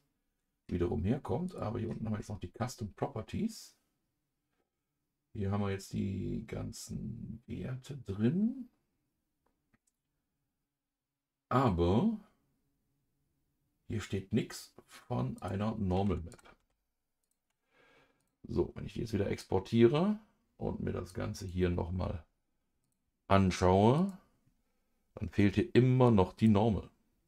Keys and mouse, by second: 1.4 click, 15.3 click, 16.3 click, 16.6 ctrl+s.